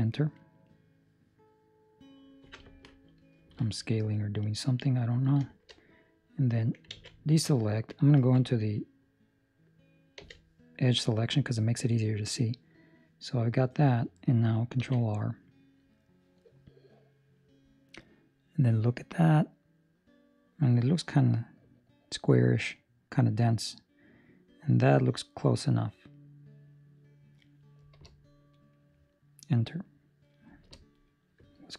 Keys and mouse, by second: 3.8 Escape, 3.8 middle click, 5.3 shift+middle click, 5.8 middle click, 6.9 alt+a, 7.1 middle click, 8.1 2, 8.6 middle click, 10.1 z, 10.6 middle click, 11.1 ctrl+middle click, 11.3 middle click, 14.7 ctrl+r.